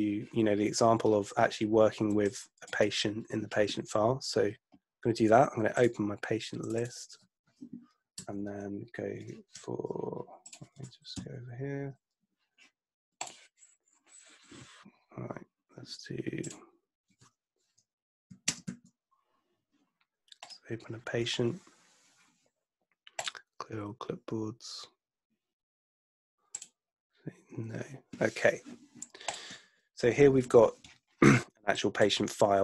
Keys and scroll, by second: 8.3 BackSpace, 11.3 ctrl+Left, 18.3 a, 18.4 space, 18.6 a, 29.7 super+F2.